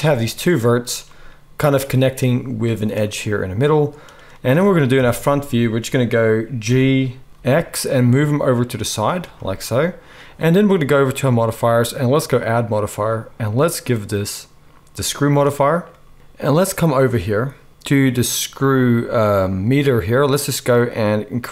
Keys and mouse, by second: 4.9 KP_1, 6.6 g, 9.0-12.2 middle drag, 12.2-21.5 drag.